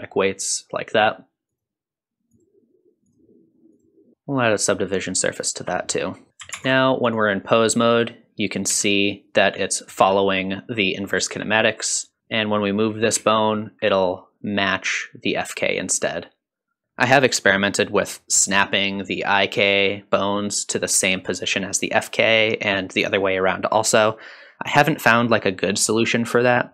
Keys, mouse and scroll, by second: 1.0 click, 1.4 alt+z, 1.5-4.1 drag, 4.1 Tab, 4.1 ctrl+2, 6.3 click, 6.5 ctrl+Tab, 7.0 click, 7.8 click, 8.7 g, 12.2 click, 12.2 r, 13.1 g.